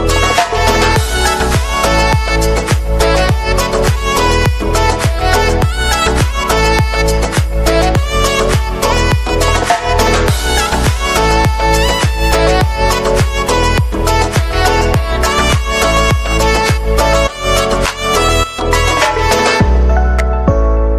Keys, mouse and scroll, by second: 1.2 right click, 2.1 right click, 4.5 right click, 6.9 right click, 10.5 right click, 13.0 right click, 14.5 right click, 15.5 right click, 16.7 right click, 19.5 right click, 20.7 right click.